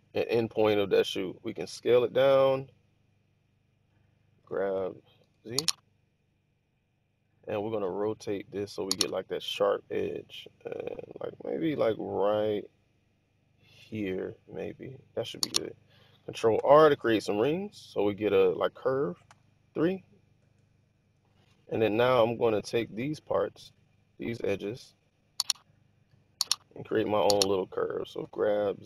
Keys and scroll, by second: 1.7 typing, 4.4-5.0 typing, 8.8 typing, 16.5 ctrl+r, 19.2 3, 20.3 Return, 20.9 Return, 26.3 1, 28.1 g.